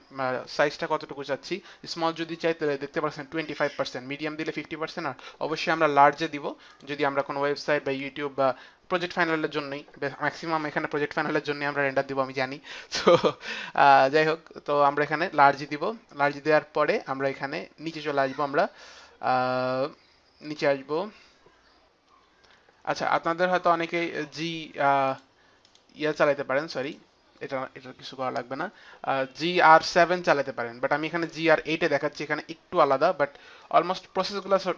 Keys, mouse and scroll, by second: 6.6 click, 22.0 F9, 25.0 click, 25.6 click, 26.8 click.